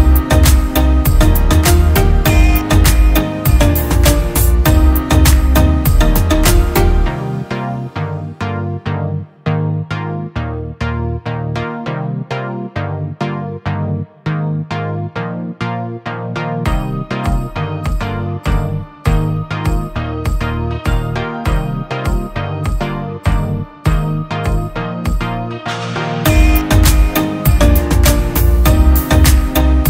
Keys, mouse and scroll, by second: 13.4 alt+right click.